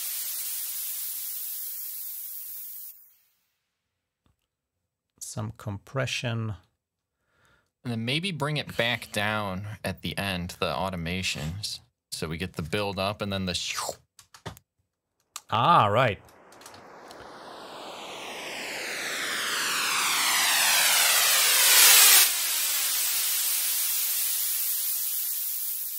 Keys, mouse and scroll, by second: 0.7 click, 2.3 click, 12.5 click, 13.4 click, 13.6 space, 14.0 space, 15.6 click, 16.4 typing, 16.7-17.2 scroll up 1, 18.8-20.2 drag, 21.4-22.4 drag, 23.8 click.